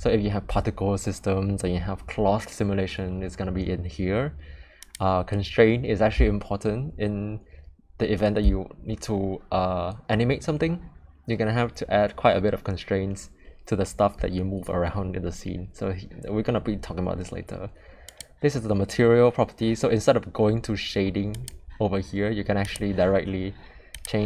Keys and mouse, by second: 18.0 click, 22.6 click.